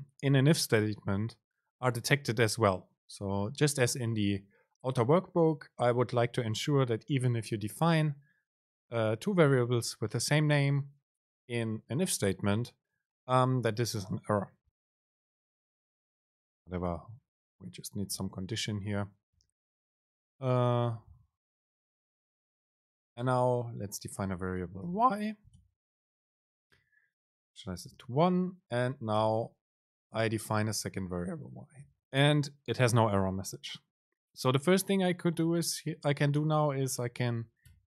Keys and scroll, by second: 15.6 Up, 18.2 BackSpace, 21.7 Down, 22.1 Up, 25.0 BackSpace, 26.1 Right, 27.2 Return, 29.3 BackSpace, 30.9 Right, 32.0 Up.